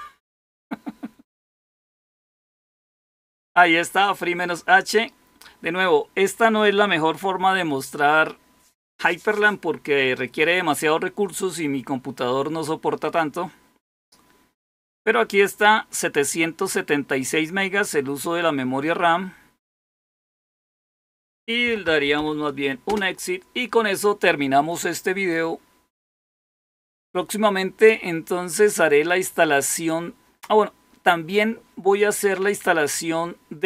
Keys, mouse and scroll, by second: 21.5-22.6 typing, 22.8 Return.